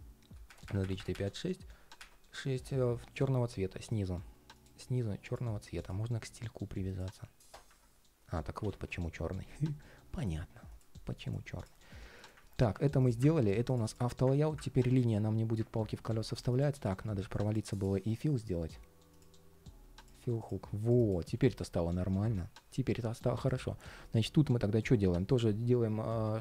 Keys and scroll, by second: 8.3 super+z, 15.8 super+z, 21.0 ctrl+shift+4.